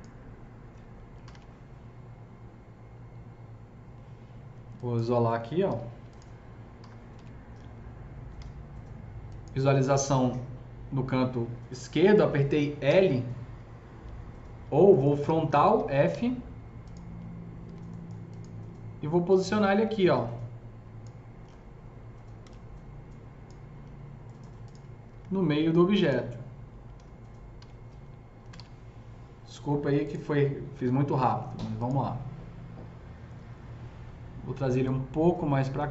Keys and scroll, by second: 1.0-1.7 typing, 5.7 ctrl+alt+q, 6.5-8.3 typing, 12.9 l, 15.1 f, 16.0 z, 17.6 F3, 22.4 s, 25.1 F3, 26.9-29.0 typing, 30.7 F3, 34.6 s.